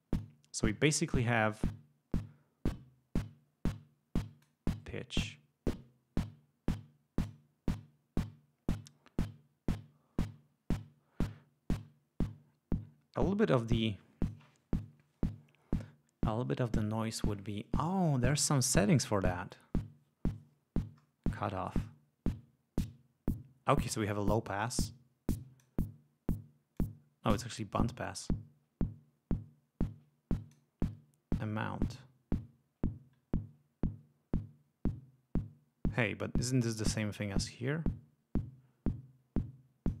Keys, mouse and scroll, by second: 2.1-4.6 drag, 5.2-7.4 drag, 11.7-14.5 drag, 21.7-25.8 drag, 26.8-30.7 drag, 31.4-36.7 drag, 37.4-40.0 drag.